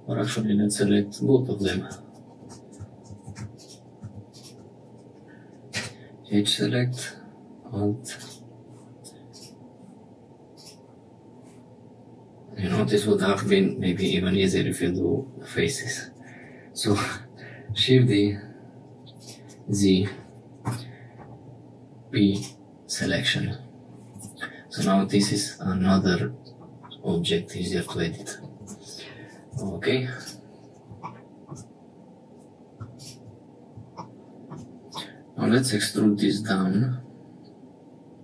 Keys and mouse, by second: 0.8 click, 0.8 middle click, 0.8 right click, 2.4 3, 5.7 2, 13.4 3, 17.0 shift+d, 20.6 p, 24.1 Tab, 24.6 click, 25.2-26.6 middle drag, 27.9 click, 28.6 Tab, 29.5 2, 30.1 click, 34.9 middle click, 35.4 e.